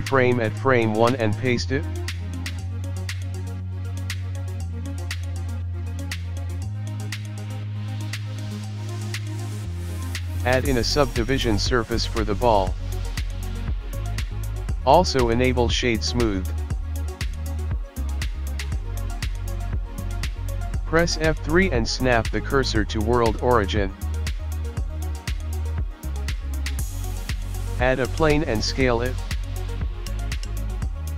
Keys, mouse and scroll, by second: 0.0 ctrl+z, 1.1 click, 1.6 ctrl+c, 2.4 ctrl+v, 3.3 click, 3.6 space, 6.8 space, 7.1 click, 8.7 click, 10.0 right click, 10.8 click, 13.9 click, 15.4 right click, 17.7 click, 17.7 middle click, 18.9 middle click, 18.9 KP_1, 19.6 scroll down 2, 20.4 ctrl+z, 20.4 ctrl+s, 20.4 scroll up 2, 20.4 KP_1, 20.6 F3, 26.7 middle click, 28.1 shift+a, 28.5 click, 28.6 s, 29.3 click, 29.5 s, 31.0 middle click.